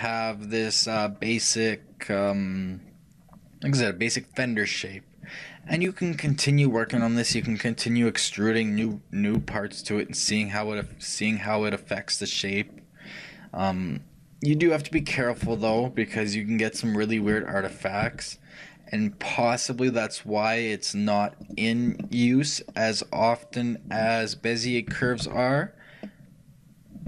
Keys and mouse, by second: 10.9 g, 16.2-17.9 middle drag, 17.9-22.1 right drag, 22.1-27.0 middle drag.